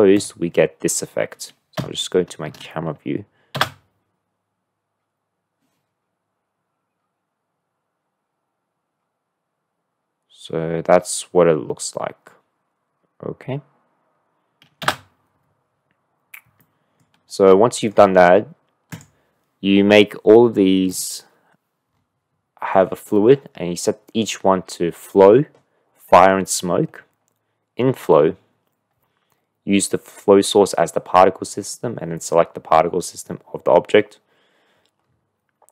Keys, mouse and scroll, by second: 0.1 click, 1.7 KP_1, 2.4 KP_0, 3.5 space, 15.8 space, 16.6-17.0 drag, 17.5-17.9 drag, 18.8 click, 20.8 click.